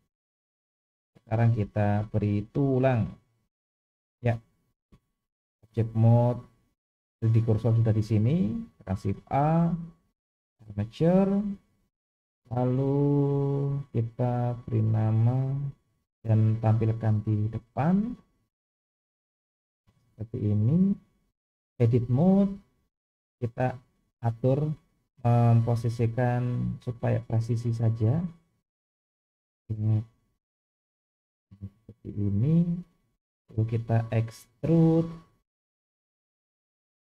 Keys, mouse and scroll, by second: 1.6 KP_1, 2.8 shift+middle click, 3.4 scroll up 2, 3.8-4.3 shift+middle drag, 8.8 shift+a, 13.5 click, 14.8 click, 15.5 click, 17.8-18.3 scroll up 2, 19.1 click, 19.9-20.2 shift+middle drag, 20.4-21.3 scroll up 2, 21.3-22.2 drag, 23.1 click, 23.6 shift+middle click, 24.7-25.3 scroll up 1, 29.6 g, 33.2 shift+middle click, 33.7-34.1 scroll down 2, 34.2 shift+middle click, 35.7 e.